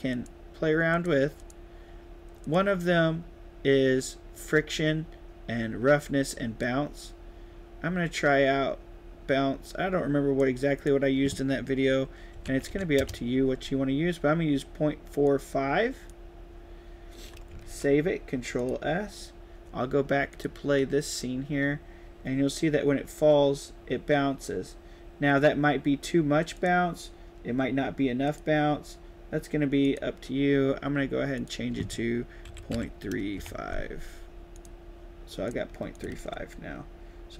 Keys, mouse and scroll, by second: 0.0 click, 0.8 click, 1.3 click, 2.3 click, 6.5-10.3 drag, 10.7 click, 15.2 click, 17.5 ctrl+s, 18.5 click, 20.2 click, 26.4 click, 28.1 click, 29.7 click, 31.3 click, 34.5 click, 35.4 click, 35.8 click, 36.1 ctrl+s.